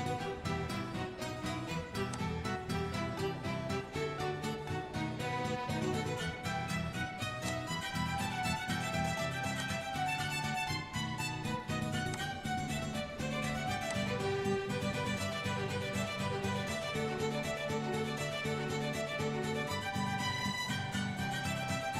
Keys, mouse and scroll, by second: 2.2 click, 4.1 g, 7.5 click, 10.7 click, 12.2 click, 20.1 ctrl+b.